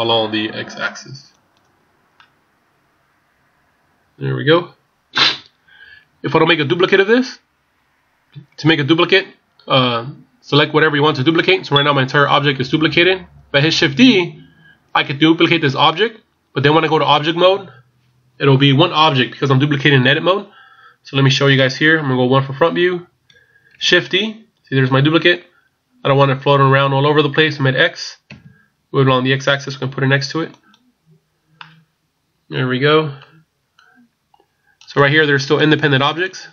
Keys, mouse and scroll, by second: 2.2 middle click, 9.1-11.4 scroll down 1, 11.4 middle click, 14.9 scroll down 1, 22.1 KP_1, 23.9 shift+d, 31.6 middle click, 34.9 right click, 35.5 right click.